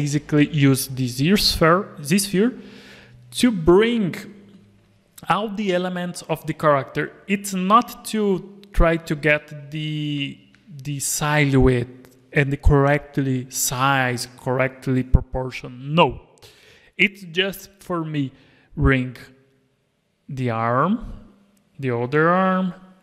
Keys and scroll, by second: 0.3 alt+a, 1.2 alt+a, 9.6 alt+a.